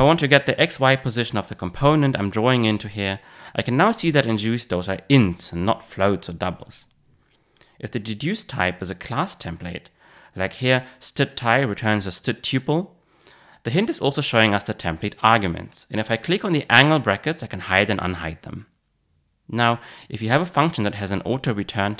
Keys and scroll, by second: 3.5 Return.